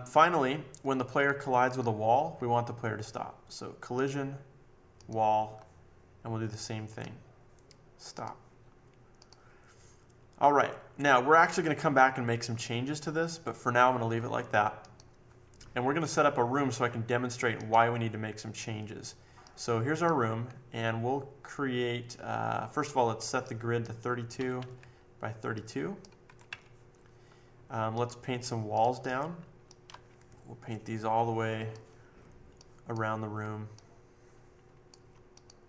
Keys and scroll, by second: 24.1-26.9 typing.